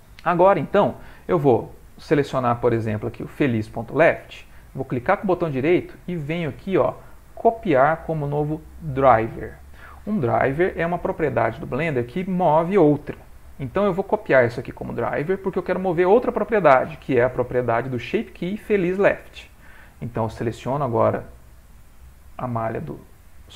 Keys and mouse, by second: 5.1 right click, 18.4 click, 21.4 click.